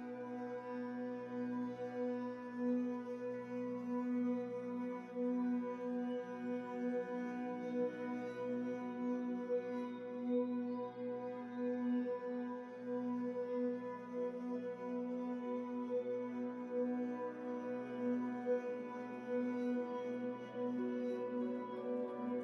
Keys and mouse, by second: 0.0-10.6 typing, 0.0 ctrl+z, 0.8 alt+a, 1.7 alt+a, 2.2 middle click, 2.7 click, 6.0 alt+a, 6.2 click, 6.7 alt+a, 6.8 middle click, 7.7 click, 8.2 middle click, 8.9-10.0 drag, 10.0 alt+a, 10.0 click, 10.6 middle click, 10.7 alt+a, 11.1 click, 12.0 click, 12.0 Tab, 12.1-18.7 typing, 13.0 Tab, 13.1-14.9 drag, 13.3 Tab, 13.4 Tab, 13.5 Tab, 13.8 Tab, 13.9 Tab, 14.3 Tab, 15.4-16.4 drag, 16.4-18.6 middle drag, 18.7-20.0 drag, 18.9 alt+a, 20.4-22.4 typing, 20.9 Tab, 20.9 click, 22.0 Tab.